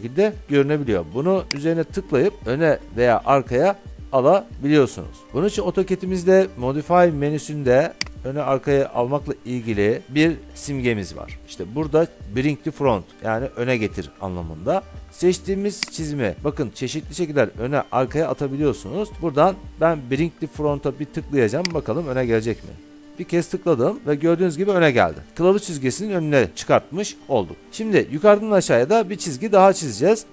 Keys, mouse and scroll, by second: 1.7-5.2 drag, 8.2-11.9 drag, 16.1 click, 21.8-22.8 drag.